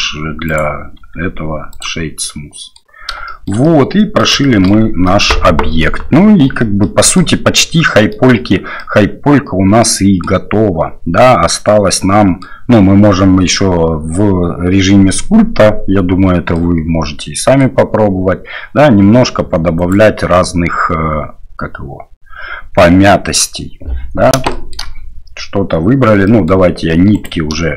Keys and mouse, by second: 0.5 right click, 1.0 q, 2.2-2.7 middle drag, 3.2 shift+middle drag, 3.6-4.2 middle drag, 4.4 shift+middle drag, 5.1-6.4 middle drag, 6.8-7.2 middle drag, 7.9 middle drag, 8.8-10.2 middle drag, 11.9-12.4 middle drag, 16.6-17.6 middle drag, 19.8 click, 22.8-23.4 middle drag, 24.5 shift+middle drag, 26.2 middle drag, 27.1 click.